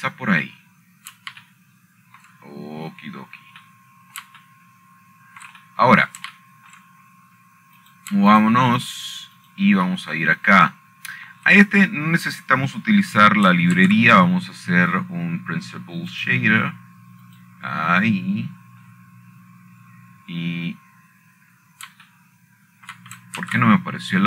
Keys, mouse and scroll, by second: 0.0 KP_5, 0.2 Return, 3.4-4.5 scroll down 2, 5.0 shift+middle click, 5.3-5.7 scroll up 5, 5.9 scroll down 3, 6.0-6.6 scroll up 1, 6.6-6.9 scroll down 1, 6.9 middle click, 8.2 shift+middle click, 8.8 shift+middle click, 9.4 shift+middle click, 9.8-10.5 scroll up 1, 10.5 click, 11.1 shift+click, 11.5 shift+click, 12.1 shift+click, 14.1 shift+middle click, 16.5 shift+a, 18.8 click, 20.0 click, 20.4-21.7 scroll down 6.